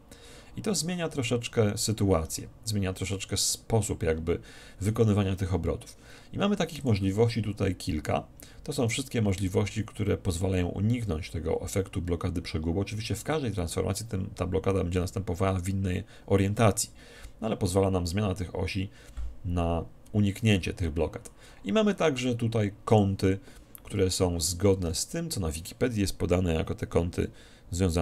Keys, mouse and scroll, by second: 7.1-8.6 drag.